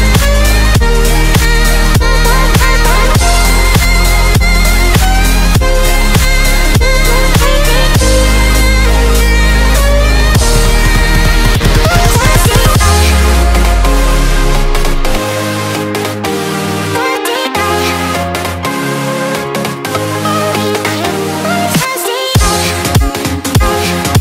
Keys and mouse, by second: 3.8 typing, 11.1 click, 11.2 typing, 12.5 Return, 12.7-17.2 typing, 18.4-24.2 typing.